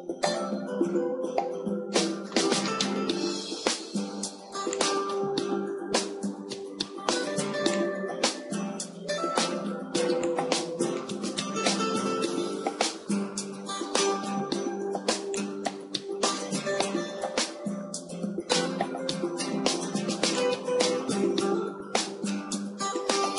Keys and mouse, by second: 0.5 r, 1.0 r, 3.4 g, 5.9-12.2 drag, 5.9 KP_0, 15.5-17.3 drag, 17.7 KP_7, 18.2 z, 20.9-23.3 drag.